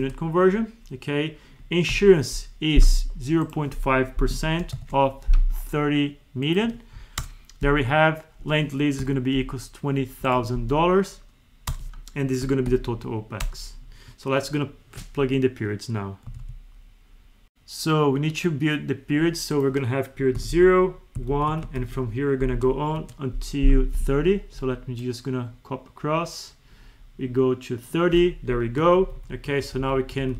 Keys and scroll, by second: 12.6 alt+=, 16.3 ctrl+F1, 20.5 Right, 21.3 Right, 21.5 Left, 28.9 ctrl+Left, 29.6 Right, 30.2 Down.